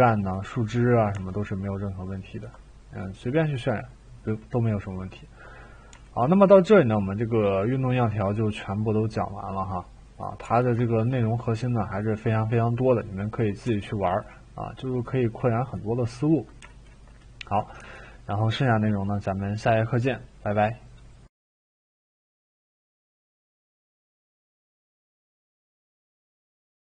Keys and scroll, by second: 17.7 e, 21.3 Delete.